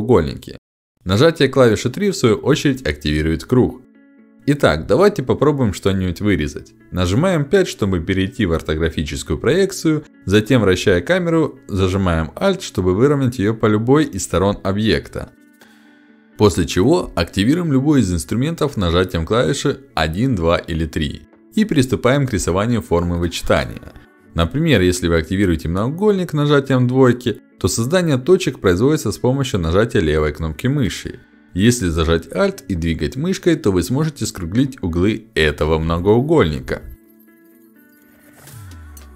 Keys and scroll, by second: 1.3 3, 7.7 5, 21.7 2.